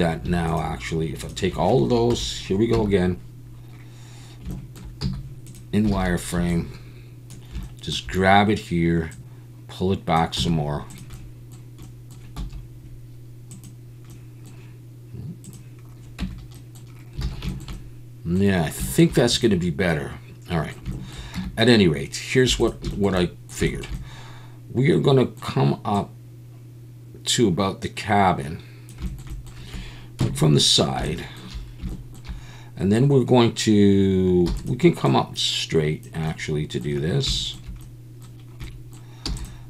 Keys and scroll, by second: 2.1 KP_7, 2.7 Tab, 5.0 z, 5.9 alt+a, 6.3 b, 10.4 z, 13.4 Escape, 16.2 Tab, 17.2 alt+a, 21.4 Tab, 22.5 2, 30.2 KP_3, 34.5 e, 39.3 e.